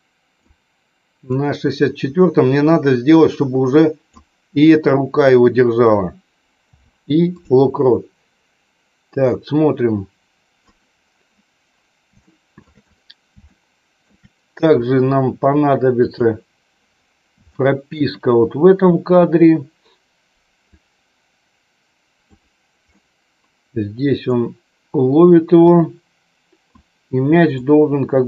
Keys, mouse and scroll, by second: 1.3-4.3 drag, 9.4-10.9 drag, 12.1 shift+middle click, 13.4 shift+middle click, 16.1 click, 17.4 shift+middle click, 20.6-22.3 drag, 22.8-25.5 middle drag, 25.5-26.8 drag, 27.5-28.2 drag.